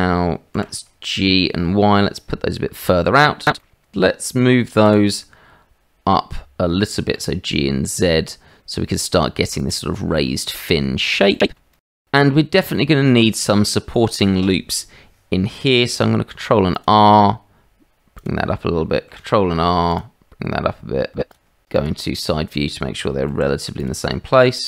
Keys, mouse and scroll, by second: 0.5 g, 3.5 middle click, 4.9 g, 10.6 middle click, 11.4 shift+middle click, 11.6-13.2 middle drag, 16.0 ctrl+r, 21.7 click, 23.3 ctrl+r.